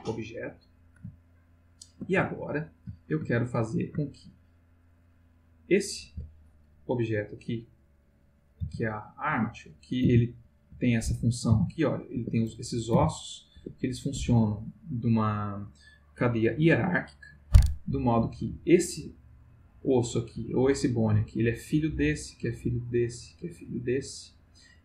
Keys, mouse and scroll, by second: 1.3 ctrl+middle click, 2.3 ctrl+shift+middle click, 3.5 ctrl+middle click, 4.8 click, 6.0 Tab, 7.1 click, 7.8 click, 8.6 r, 9.3 Escape, 9.8 click, 10.1 r, 10.8 Escape, 11.3 click, 11.5 r, 12.1 Escape, 12.8 click, 12.9 r, 13.5 Escape, 22.0 click, 22.9 click, 23.8 click.